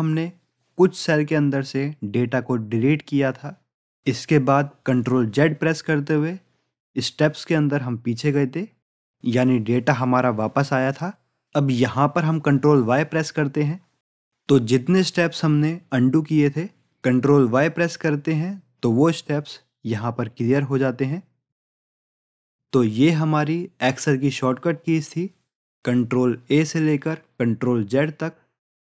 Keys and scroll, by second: 13.9 ctrl+y.